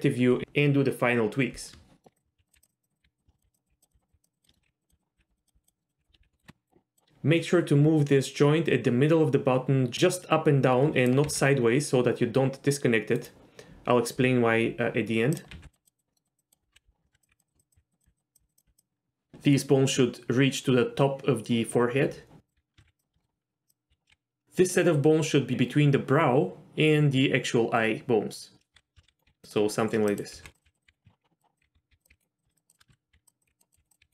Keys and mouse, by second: 2.0 shift+middle click, 2.1 click, 2.2-6.4 typing, 2.7 click, 2.8 click, 2.9 click, 3.3 shift+middle click, 3.4 click, 4.3 click, 4.5 shift+middle click, 4.9 click, 5.4 click, 5.8 middle click, 5.9 click, 6.9 click, 10.0-11.1 drag, 11.2 g, 15.5 g, 15.8 click, 16.1 middle click, 16.4 click, 16.7-18.6 typing, 17.0 shift+middle click, 17.2 click, 17.7 click, 18.0 click, 22.4 click, 22.7 ctrl+f, 22.8 ctrl+z, 22.8 g, 23.1 shift+middle click, 23.9 l, 24.1 g, 28.7 alt+a, 29.0 l, 29.1 s, 29.2 g, 30.3-32.1 typing, 30.8 click, 31.0 ctrl+z, 32.4 click, 32.5 shift+click, 32.7 shift+click, 32.9 ctrl+z, 33.1-34.1 typing, 33.9 click.